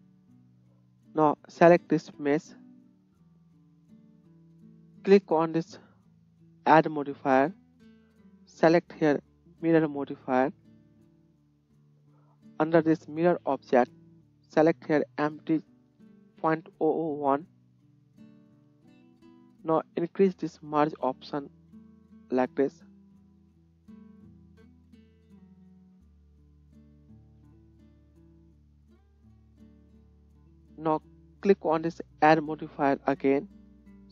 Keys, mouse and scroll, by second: 2.3-4.5 middle drag, 4.5-34.1 drag, 27.3 shift+z.